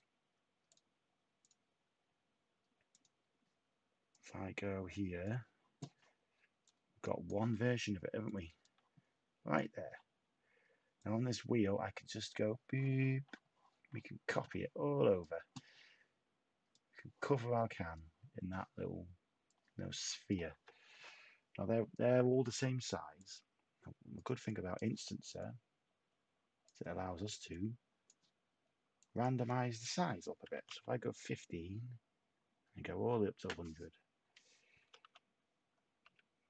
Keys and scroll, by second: 30.1-31.0 typing, 34.8 7, 35.1 5, 36.0 Tab.